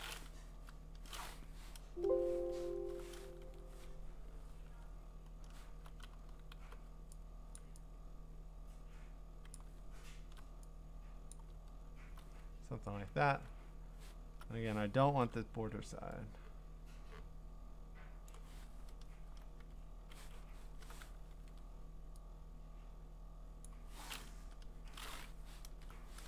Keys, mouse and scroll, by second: 0.5 BackSpace, 2.2 alt+BackSpace, 2.2 Escape, 2.8 alt+BackSpace, 3.4 ctrl+d, 3.9-5.5 scroll, 6.6 b, 7.6 click, 9.5 click, 9.8-11.3 scroll, 11.3 click, 11.6 scroll, 11.7-12.2 scroll down 8, 14.2-15.2 scroll up 4, 18.3 click, 19.6 BackSpace, 20.3 Escape, 20.7 alt+BackSpace, 21.3 ctrl+d, 23.6 click, 24.3 BackSpace, 25.2 Escape, 25.7 alt+BackSpace.